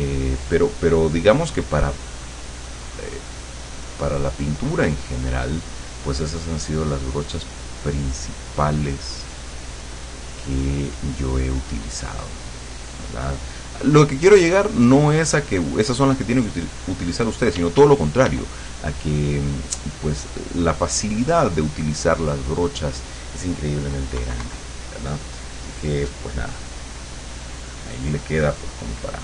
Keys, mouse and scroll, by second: 5.7 click, 6.3 middle click, 7.9-16.6 drag, 16.7 middle click, 17.6 d, 18.7-22.9 drag, 24.2 KP_Subtract, 25.5-27.0 drag, 27.3 middle click.